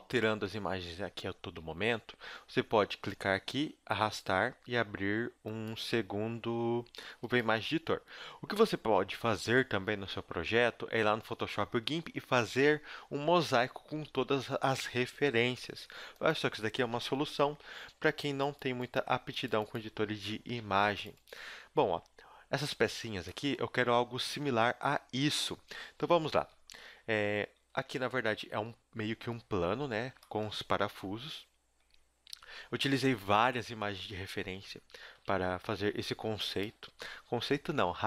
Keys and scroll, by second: 26.7 KP_1, 27.7 KP_7, 33.2 z, 33.9 shift+a, 34.5 shift+c, 35.2 shift+a, 37.3 Tab, 37.7 s.